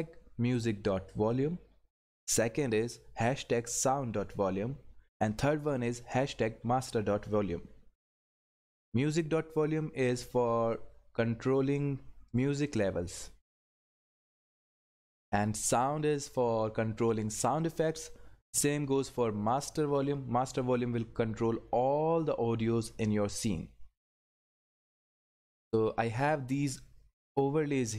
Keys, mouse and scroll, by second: 12.3 click.